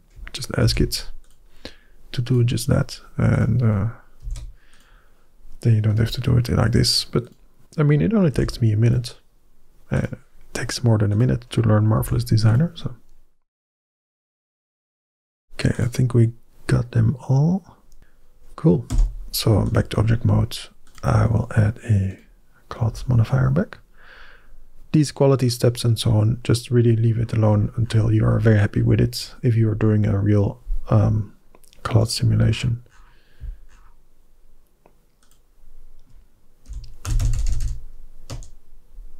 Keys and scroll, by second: 0.6 ctrl+h, 4.1 ctrl+h, 8.2 ctrl+h, 11.8 ctrl+h, 18.7 Tab, 36.5-37.4 typing, 38.1 Return.